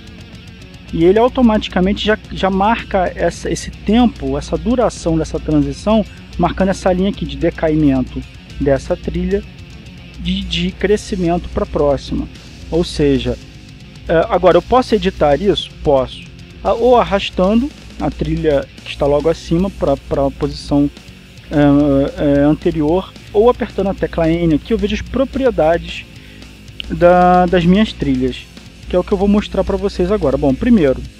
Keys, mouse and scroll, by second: 13.2-14.2 scroll down 1, 14.8 click, 20.6-21.2 scroll down 1, 25.3 n, 26.0-26.7 scroll up 2, 29.0-31.1 drag.